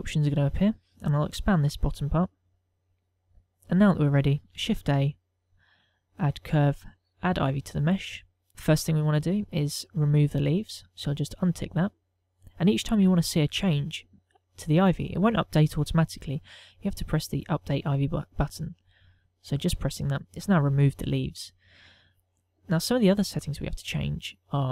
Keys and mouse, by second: 0.4 click, 5.2 shift+a, 11.2 click, 19.9 click, 22.0 middle click.